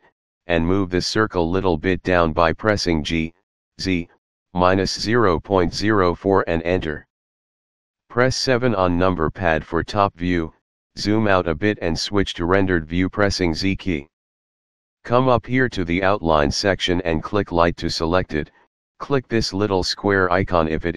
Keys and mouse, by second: 1.2 g, 1.9 z, 2.8 KP_Subtract, 4.4 KP_Decimal, 5.0 KP_0, 5.3 KP_4, 6.4 Return, 7.5 KP_7, 11.4 z, 12.7 click, 17.2 click.